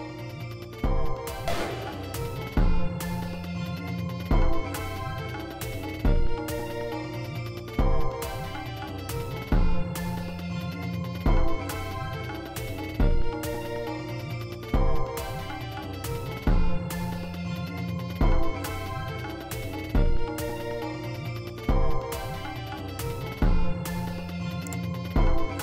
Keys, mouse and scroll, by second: 0.6 e, 1.3-2.4 drag, 3.7-5.2 scroll down 2, 5.2-5.7 scroll down 1, 5.9-6.7 scroll down 4, 6.9 scroll up 2, 8.6-9.7 scroll down 2, 9.7-11.2 scroll down 1, 12.7 click, 14.2 g, 14.4 right click, 16.7 click, 18.1 space, 19.6 space, 21.6 space, 22.4 space, 23.3 space, 24.6 d.